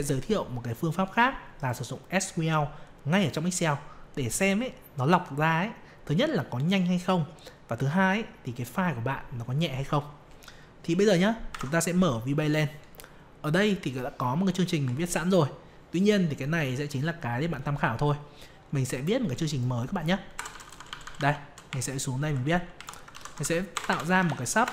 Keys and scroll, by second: 11.5 alt+F11.